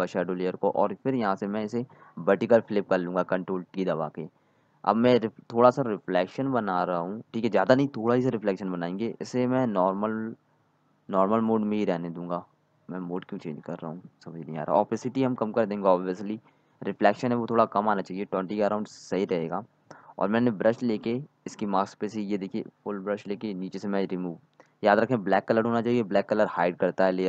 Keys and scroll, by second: 0.3 ctrl+j, 1.9 ctrl+z, 2.4 ctrl+t, 26.4 ctrl+z, 26.8 x.